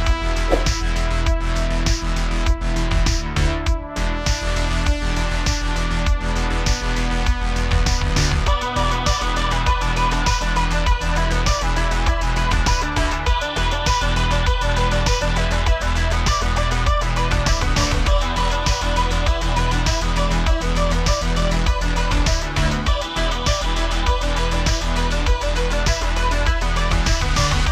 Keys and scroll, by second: 1.0 space, 1.0 space, 1.8 space, 4.3 typing, 7.3 shift+z, 8.5 typing, 11.4-12.7 typing, 22.0 super+z, 22.1 super+z, 22.2 super+z, 22.3 super+z, 22.4 super+z.